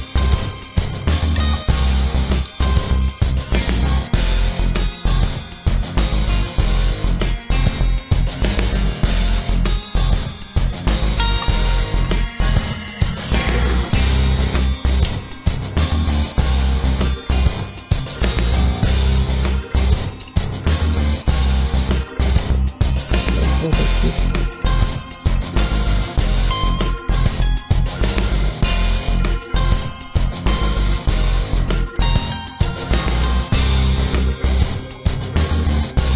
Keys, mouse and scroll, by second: 2.3 a, 2.6 scroll down 1, 2.7 shift+middle click, 3.8 alt+right click, 4.5 alt+shift+right click, 5.3 click, 7.3 shift+middle click, 7.9 alt+right click, 8.7 alt+shift+right click, 9.1 s, 11.7 a, 12.3 shift+middle click, 12.6 middle click, 13.6 alt+right click, 14.3 alt+shift+right click, 14.7 s, 19.4 Tab, 19.8 shift+middle click, 20.2 Tab, 20.6 shift+middle click, 21.1 middle click, 22.0 scroll down 1, 22.6 scroll up 1, 23.0 ctrl+r, 25.1 click, 25.3 ctrl+r, 25.7 click, 26.1 ctrl+r, 28.0 click, 28.2 ctrl+r, 28.6 click, 29.1 ctrl+r, 31.5 click, 32.0 ctrl+r, 34.0 click, 34.6 alt+shift+right click, 35.0 s.